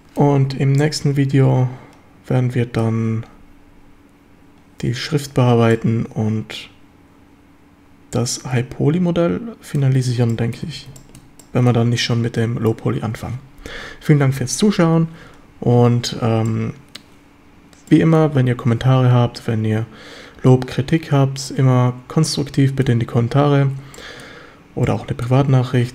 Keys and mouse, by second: 0.8-2.8 middle drag, 5.7-8.7 drag, 8.7-9.8 middle drag, 9.8 click, 10.3-10.8 drag, 10.7 ctrl+s, 11.0 shift+click, 11.4-11.7 drag, 16.5-17.0 drag, 17.9-18.2 drag, 21.5-22.8 drag, 24.0 shift+middle click, 24.8-25.3 middle drag.